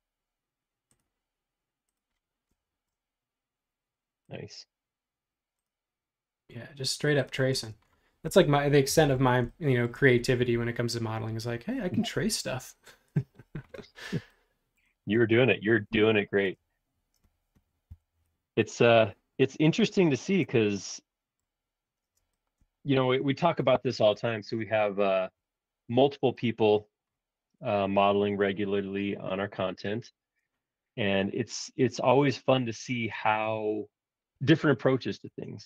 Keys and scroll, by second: 7.5 space, 8.9 BackSpace, 17.9 l, 20.4 space, 22.0 space, 28.0 p, 34.1-35.6 typing.